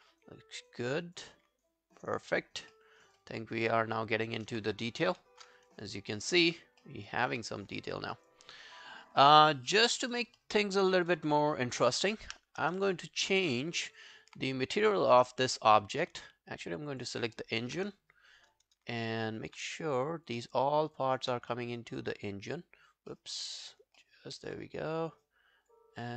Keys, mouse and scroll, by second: 0.1 right click, 1.4 scroll down 2, 1.7 alt+click, 2.5-3.0 alt+scroll down 3, 2.7 alt+middle click, 3.0 alt+right click, 3.3 alt+click, 5.1 ctrl+i, 5.7 alt+click, 6.8 alt+middle click, 7.1 alt+right click, 7.4 alt+middle click, 7.7 alt+right click, 7.9 alt+click, 10.4 alt+middle click, 10.7 alt+scroll down 1, 10.9 alt+click, 12.6-13.1 alt+scroll down 2, 12.9 alt+middle click, 13.1 alt+right click, 13.3 alt+click, 13.6 alt+middle click, 13.8 alt+right click, 14.0 alt+click, 15.4 alt+middle click, 15.6 alt+right click, 15.8 alt+click, 17.4 alt+middle click, 19.1 alt+middle click, 19.3 alt+right click, 20.9 shift+click, 21.5 middle click, 24.2 alt+right click, 26.0 alt+middle click.